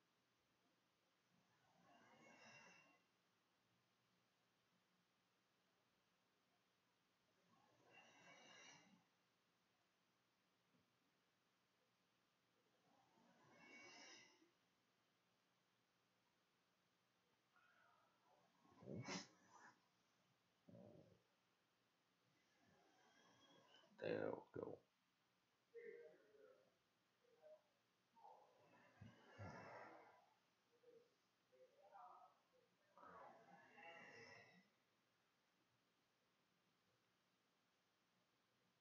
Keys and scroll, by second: 3.4 Tab, 4.4-6.8 typing, 8.5 ctrl+space, 9.2 ctrl+v, 9.8 v, 10.7 t, 13.9-16.5 typing, 18.2-19.5 typing, 22.7-26.4 typing, 27.6 ctrl+shift+a, 27.8 ctrl+shift+s, 30.9 r.